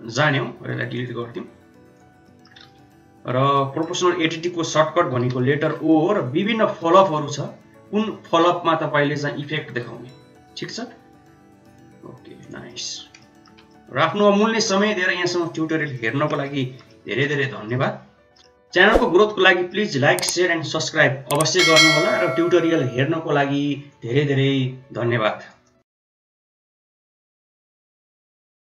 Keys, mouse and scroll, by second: 0.5 x, 2.2 middle click, 2.7 shift+z, 3.5 shift+middle click, 3.9 middle click, 5.2 g, 12.6 middle click, 13.1 shift+middle click, 13.7-14.7 middle drag, 14.7 middle click, 15.4-16.7 shift+middle drag, 16.8 middle click, 17.4 shift+middle click, 17.8-18.9 middle drag, 19.4 shift+middle click.